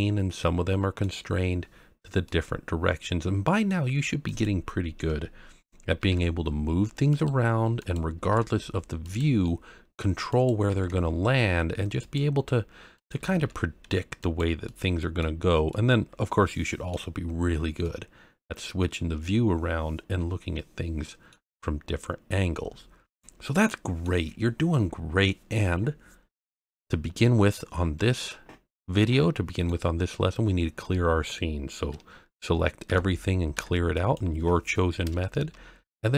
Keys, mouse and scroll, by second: 2.2-3.7 middle drag, 4.2 click, 6.0 g, 6.1 z, 7.1 click, 7.8 click, 8.2 g, 8.3 z, 9.0 click, 9.4-9.9 middle drag, 10.3 click, 10.7 g, 10.7 z, 12.0 click, 12.9 click, 13.3 g, 13.4 y, 14.2 click, 14.6-15.2 middle drag, 15.4 scroll down 1, 15.7-16.9 middle drag, 17.2-17.8 scroll up 1, 17.8-21.3 middle drag, 17.8-18.4 scroll up 1, 22.7 scroll down 1, 23.1-24.0 middle drag, 27.6-28.0 scroll up 1, 28.2-29.7 middle drag, 32.8 a, 33.5 x.